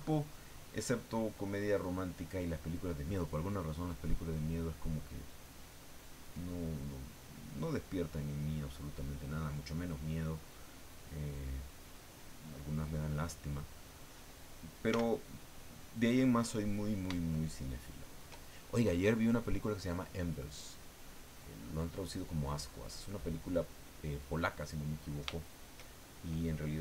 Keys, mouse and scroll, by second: 0.4 click, 3.8 click, 4.9 click, 6.1 click, 6.9-9.2 drag, 10.5 click, 11.1 click, 11.6 click, 14.9 f, 15.9 click, 17.3 shift+middle click, 18.7-26.5 shift+middle drag.